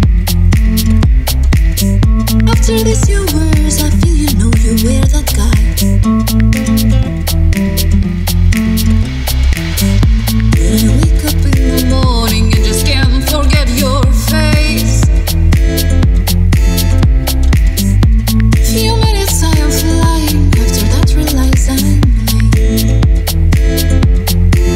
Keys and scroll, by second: 4.1 Left, 4.6 Up, 5.4 Up, 9.2 super+z, 21.4 super+c, 22.3 super+v.